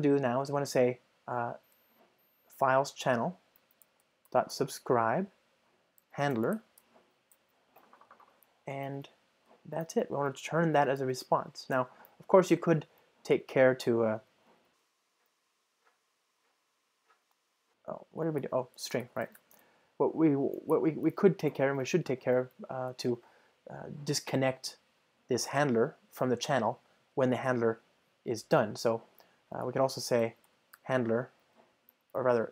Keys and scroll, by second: 3.9 Return, 11.7 Return, 15.3 alt+Return, 18.5 ctrl+alt+shift+Right, 19.6 alt+shift+Right, 19.9 Escape, 31.4 Return.